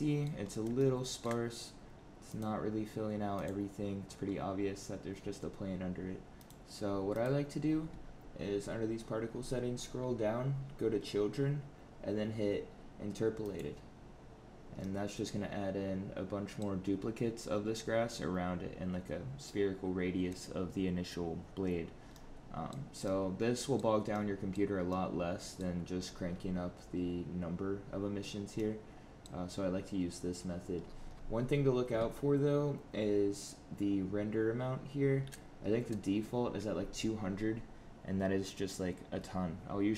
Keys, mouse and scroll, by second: 0.3 scroll up 2, 0.7 shift+middle click, 2.3 click, 3.3 click, 6.4 click, 7.0 click, 8.9-10.0 scroll down 13, 13.5 click, 14.8 middle click, 22.1 middle click, 23.0 middle click, 24.1 middle click, 24.9 middle click, 25.9-26.5 scroll up 15, 28.5 middle click, 30.7-31.5 scroll down 17.